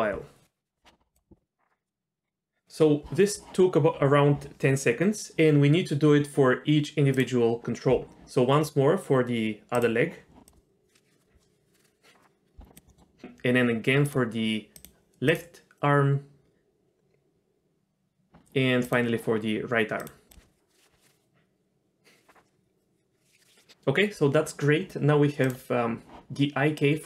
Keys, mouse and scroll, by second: 7.2 click, 9.7-12.3 drag, 12.7 click, 12.9 middle click, 14.0 click, 14.8 click, 18.8 click, 20.0 click, 25.4 click, 26.8-27.0 drag.